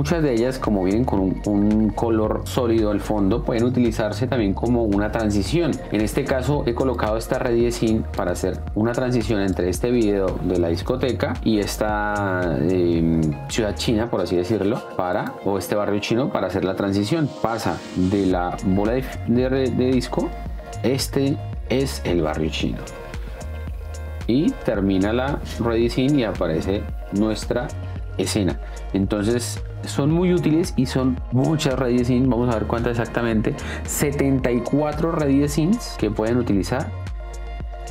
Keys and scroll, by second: 7.6 d, 8.6 space, 14.9 d, 19.2 space, 29.6 space.